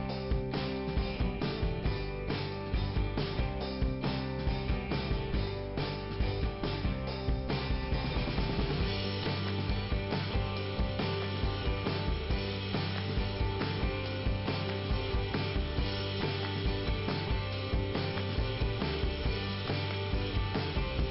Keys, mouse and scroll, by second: 12.0 click, 13.5-15.0 scroll up 2, 15.0 click, 15.4 click, 20.8 click.